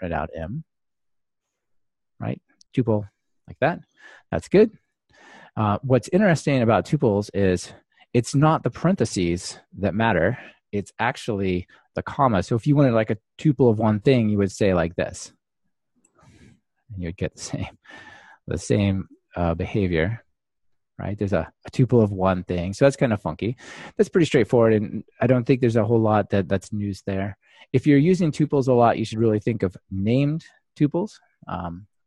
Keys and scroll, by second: 1.2 ctrl+r, 16.7 super+c, 17.5 super+x, 18.5 super+v, 19.6 ctrl+r.